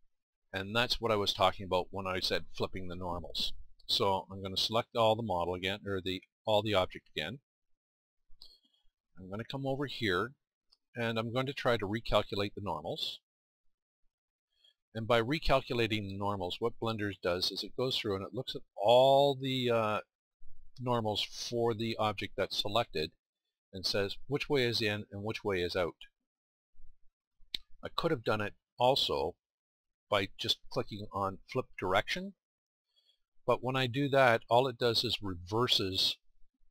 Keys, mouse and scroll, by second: 0.4 middle click, 0.6 middle click, 6.5 a, 7.4 a, 14.7-21.6 middle drag, 23.8-25.7 scroll up 1, 32.1 middle click.